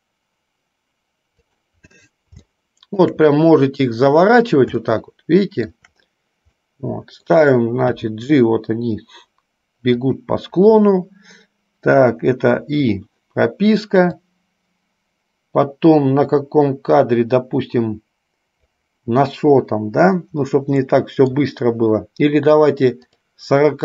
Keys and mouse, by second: 2.8-3.4 shift+middle drag, 5.0-6.0 shift+middle drag, 6.8 middle click, 8.2 g, 12.7 i, 14.4-18.9 drag, 21.0 middle click, 23.3 click.